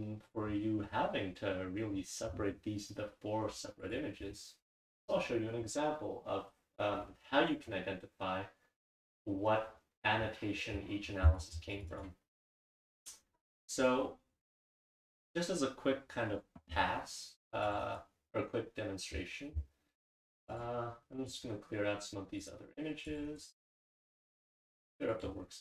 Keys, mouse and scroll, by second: 9.1 click, 11.3 click, 11.7 click, 11.9 click, 17.7 click, 17.8 right click, 23.1 click, 23.3 right click.